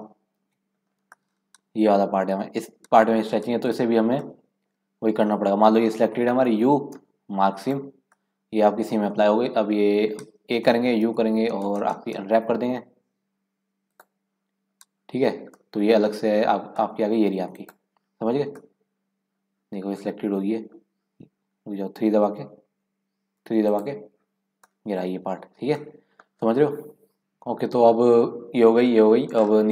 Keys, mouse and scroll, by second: 0.3 KP_Decimal, 0.8-1.2 scroll down 4, 1.2 middle click, 1.9-2.2 scroll down 1, 2.2-3.4 scroll up 2, 4.2-6.4 middle drag, 6.4 u, 8.1 middle click, 9.0 scroll up 1, 9.2 middle click, 9.5-10.0 scroll down 1, 10.5 a, 11.0 u, 14.6-15.0 scroll down 4, 15.4 scroll up 1, 15.6-17.5 middle drag, 17.5 click, 18.6-21.6 middle drag, 22.3 2, 22.9 1, 23.4 3, 23.7 click, 24.6 middle click, 25.5 scroll up 4, 25.7-27.2 middle drag, 27.2 scroll up 3, 29.3 scroll down 3.